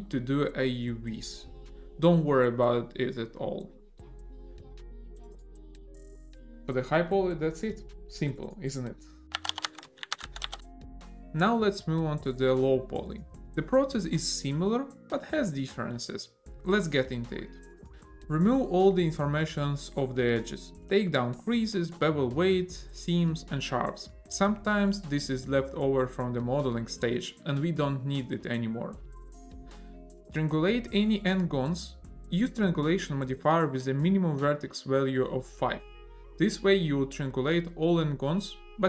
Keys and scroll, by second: 0.2 n, 12.6 a, 15.7 Tab, 16.9 a, 18.2 shift+e, 18.9 =, 19.4 1, 19.7 Return, 21.9 ctrl+e, 24.2 ctrl+e, 25.8 ctrl+e, 26.9 =, 27.3 1, 27.6 Return, 28.4 a, 30.3 Tab.